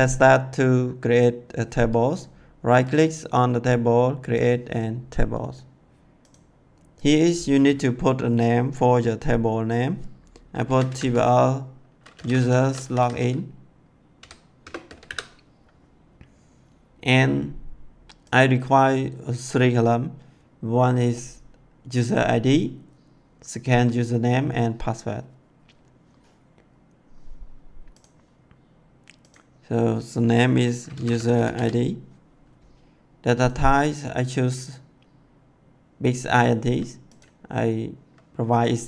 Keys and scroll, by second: 10.6 t, 10.8 b, 10.9 l, 12.1-12.9 typing, 14.1 o, 14.5 BackSpace, 14.8 i, 15.0 n, 30.9-31.5 typing.